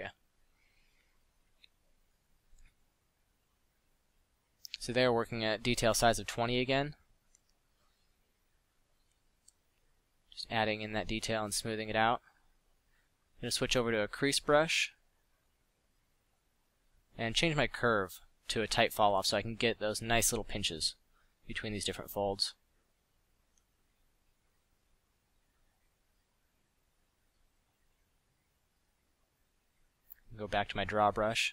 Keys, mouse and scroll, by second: 0.1 f, 4.1 f, 8.8 middle drag, 10.8 f, 14.1 f, 20.2-20.7 drag, 21.3 f, 22.8 drag, 23.7 middle drag, 24.6 f, 27.7 s, 28.0 s, 29.5 f.